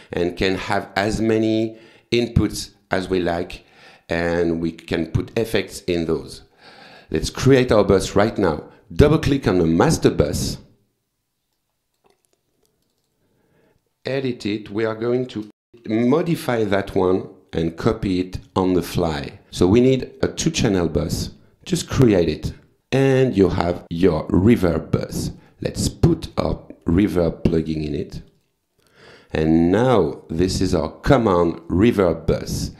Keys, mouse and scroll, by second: 9.4 click, 11.6 click, 12.8 click, 15.1-16.8 typing, 19.9 click, 21.9 click, 23.8 click, 25.0 click, 25.4 right click, 26.3 click, 28.2 click, 29.7 click, 31.6 click.